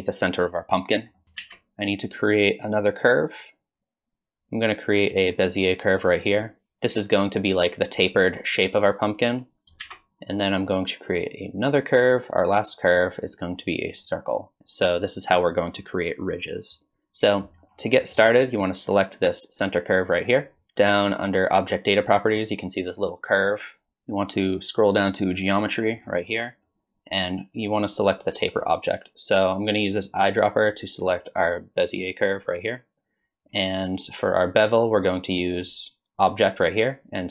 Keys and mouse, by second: 1.2 click, 1.4 shift+a, 6.4 click, 9.8 shift+a, 17.2 drag, 18.0 drag, 23.4 click, 25.3 click, 30.0 click, 35.6-37.3 drag.